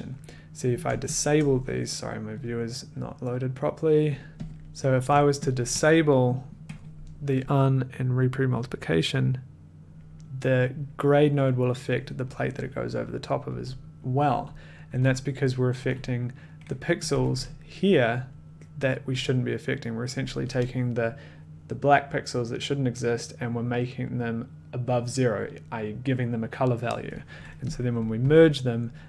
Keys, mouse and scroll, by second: 1.1 shift+click, 2.4 click, 4.2 click, 4.3 middle click, 4.5 click, 5.5 shift+click, 9.5 d, 13.4 d, 14.2 d, 14.8 d, 15.7 d, 16.7 click, 17.1 click, 17.1 1, 28.0 click, 28.2 1.